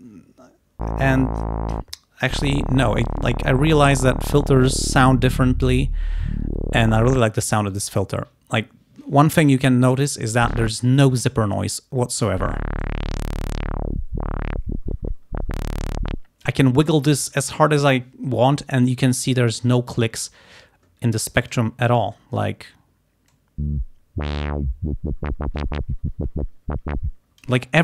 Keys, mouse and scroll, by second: 4.0-7.5 drag, 12.9-16.7 drag, 25.4 click, 27.3 click.